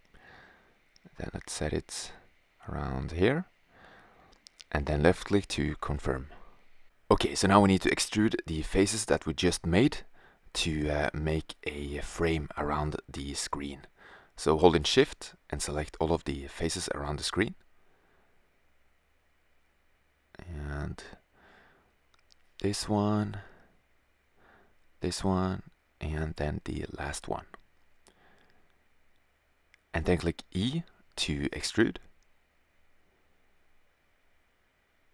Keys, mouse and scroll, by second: 5.6-7.4 middle drag, 8.2 middle click, 11.2 click, 13.1-15.3 drag, 15.4 middle click, 18.2-19.9 middle drag, 23.8-25.9 middle drag, 28.7-29.9 right drag, 31.9 middle click, 33.9 middle click.